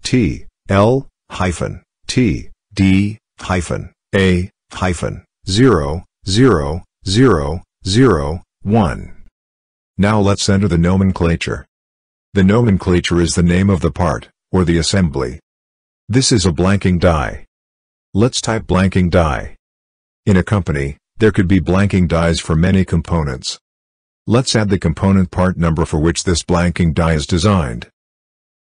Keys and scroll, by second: 0.5 t, 2.9 t, 3.4 d, 4.0 -, 5.9 a, 6.6 -, 7.6 0, 9.1 1, 16.1-21.1 typing, 27.9 ctrl+c.